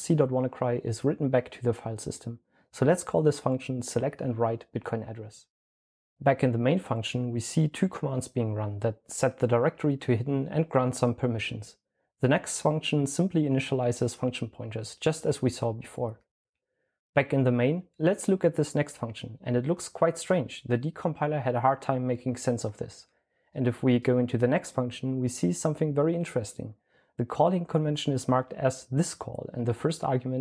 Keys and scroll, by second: 2.6-4.9 typing, 6.3 typing, 14.4-16.1 typing.